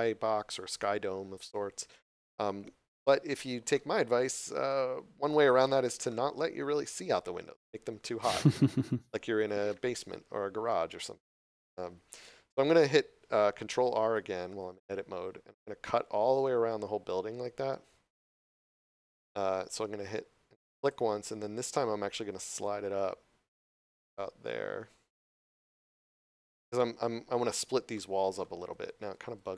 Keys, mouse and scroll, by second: 3.6 middle click, 4.9 scroll down 1, 6.0 middle click, 9.6 middle click, 13.9 ctrl+r, 20.7 click, 25.0 click, 25.4 middle click.